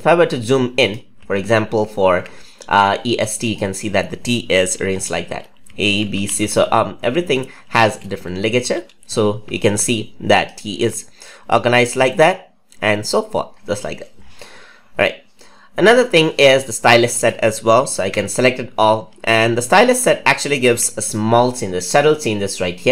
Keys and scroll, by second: 17.9 ctrl+a.